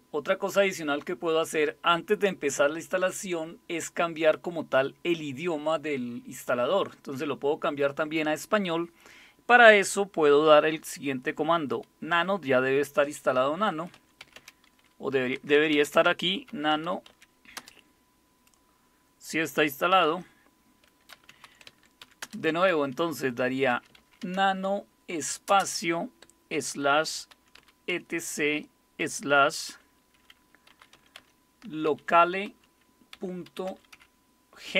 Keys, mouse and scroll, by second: 13.5-17.6 typing, 19.9 ctrl+x, 20.9-29.0 typing, 30.4-34.4 typing.